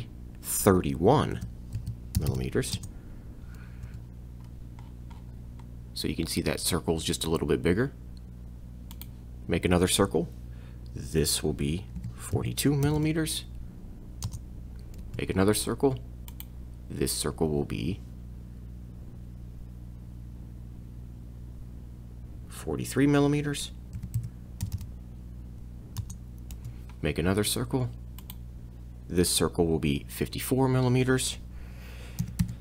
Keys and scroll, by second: 1.4 3, 1.8 1, 2.2 m, 3.9 c, 12.0 4, 12.4 2, 12.9 m, 14.3 Return, 15.0 c, 24.0 4, 24.2 3, 24.6 m, 26.5 c, 32.2 5, 32.4 4.